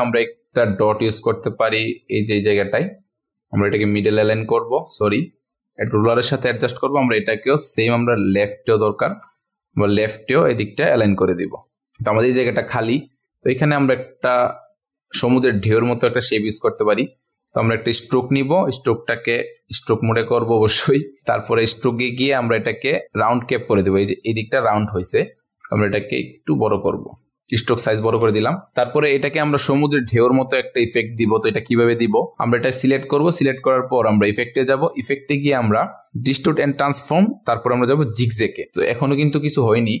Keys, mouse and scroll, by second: 1.4 shift+click, 2.5 click, 6.6-7.2 ctrl+alt+scroll down 1, 7.4-8.1 ctrl+alt+scroll down 1, 8.1 click, 9.7 click, 11.9 ctrl+a, 12.1 ctrl+alt+scroll up 1, 13.7 right click, 14.8 click, 17.3 shift+click, 19.0 click, 19.6 v, 24.1 ctrl+alt+scroll up 1, 25.0 ctrl+alt+scroll up 1, 26.3-27.1 scroll up 1, 27.9 click, 28.4-28.7 ctrl+alt+scroll down 1, 28.7-40.0 drag.